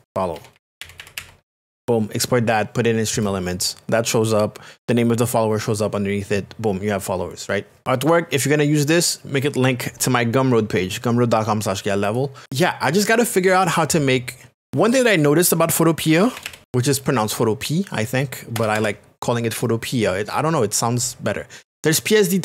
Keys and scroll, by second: 0.1-1.9 typing, 7.8 k, 15.6-16.9 typing, 18.5 BackSpace, 18.7 Return.